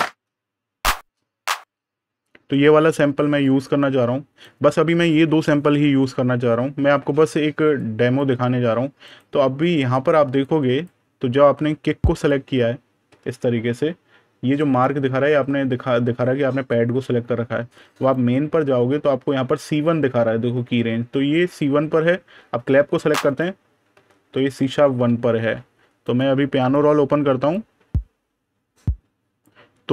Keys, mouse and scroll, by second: 0.2-0.7 scroll down 1, 0.7 click, 7.6 click, 8.9 right click, 10.3 click, 11.6 super+KP_Add, 12.0 click, 12.9 super+KP_Subtract, 15.0 super+KP_Add, 16.3 super+KP_Subtract, 17.8 click, 23.1 click, 25.9 right click, 26.4 click.